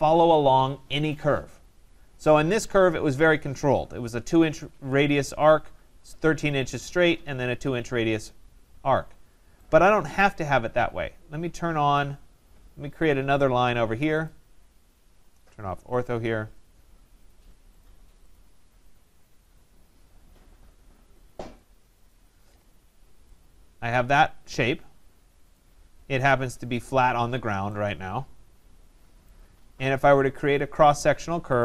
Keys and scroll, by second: 22.1 Return.